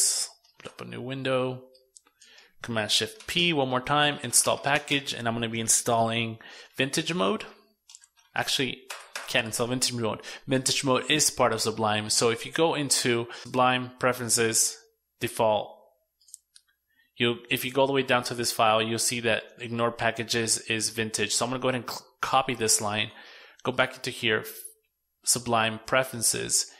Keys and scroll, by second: 2.3 shift+super+p, 20.3 super+c, 21.9 super+w.